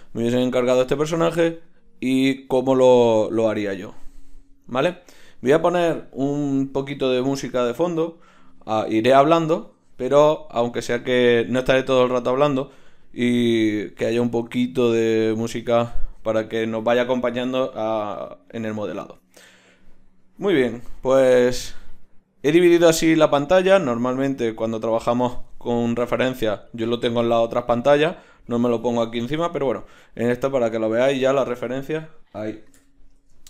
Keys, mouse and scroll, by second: 32.8 KP_1.